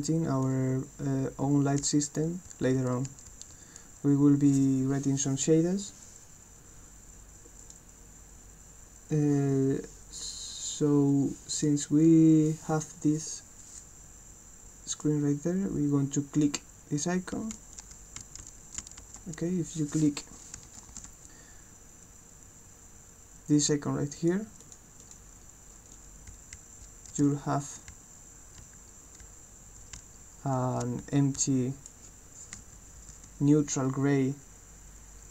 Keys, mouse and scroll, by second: 0.4-3.8 right drag, 1.4-3.3 typing, 7.6 click, 11.5 click, 12.6-15.1 right drag, 16.3 click, 17.1 right click, 17.2-19.5 typing, 17.8-19.1 right drag, 23.5 click, 24.2 click, 24.6 click, 25.0 click, 25.9-31.8 right drag, 26.1-31.8 typing.